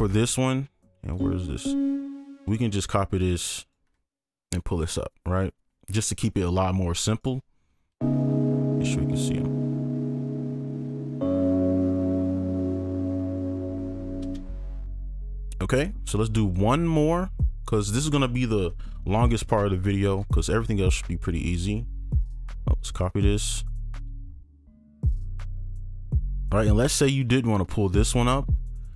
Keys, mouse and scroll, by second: 1.6 double click, 2.1 ctrl+click, 2.5 shift+click, 5.7-6.3 scroll down 1, 7.2 right click, 10.4-10.7 scroll down 1, 11.4-12.7 scroll up 1, 14.2 space, 15.5-16.5 scroll down 1, 16.5 ctrl+click, 17.1 shift+click, 20.2 ctrl+Left, 20.3 ctrl+Up, 21.4 scroll down 1, 22.2 ctrl+Down, 23.0 shift+click, 23.6 ctrl+Up, 23.6 shift+click, 24.0 ctrl+click, 24.3 shift+click, 25.5 shift+click, 26.6 right click, 27.2 ctrl+click, 28.6 ctrl+Down, 28.8 ctrl+click.